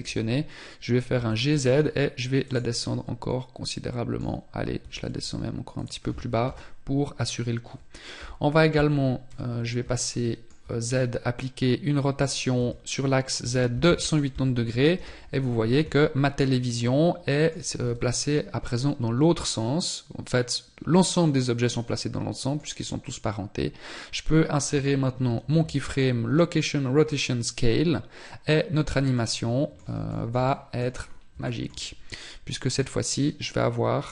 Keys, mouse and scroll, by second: 0.5 g, 2.1 middle click, 7.5 KP_7, 8.6 z, 18.3 scroll up 2, 24.6 i, 30.3 scroll down 4, 31.9 click.